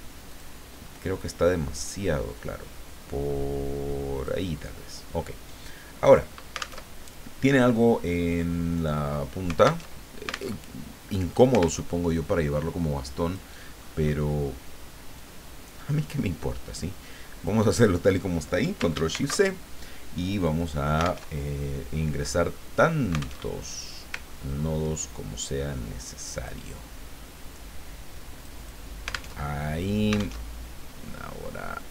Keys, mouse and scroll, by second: 0.2 click, 1.7-4.4 drag, 6.0 click, 6.9 alt+Tab, 9.9 alt+Tab, 11.7 alt+Tab, 13.2 click, 13.8-14.3 scroll up 1, 15.3-17.7 drag, 19.1 ctrl+shift+c, 20.3 click, 21.3 alt+Tab, 23.4 alt+Tab, 24.2-24.7 ctrl+scroll up 2, 26.1 click, 28.4 click, 29.4 alt+Tab, 30.4 alt+Tab, 31.8 click.